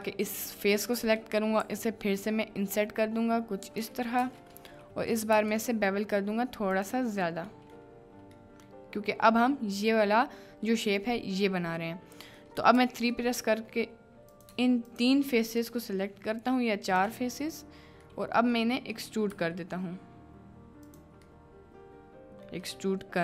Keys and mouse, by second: 0.3 click, 1.6 i, 2.4-4.6 drag, 5.3 ctrl+b, 7.6 click, 8.4 click, 9.6 middle click, 12.5 middle click, 12.8 3, 13.3 middle click, 14.3 click, 16.9 shift+click, 18.0 click, 18.4 middle click, 18.9 middle click, 19.3 e, 20.8 click, 21.3 middle click, 22.2 right click, 22.3 middle click.